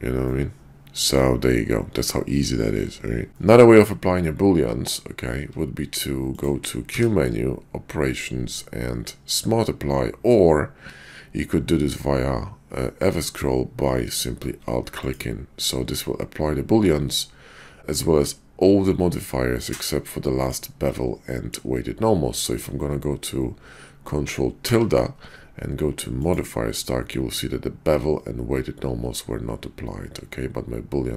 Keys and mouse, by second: 0.3-1.4 drag, 1.4-3.5 middle drag, 3.3 shift+Tab, 6.9 q, 17.8-20.5 middle drag, 21.3 shift+drag, 24.6 ctrl+`.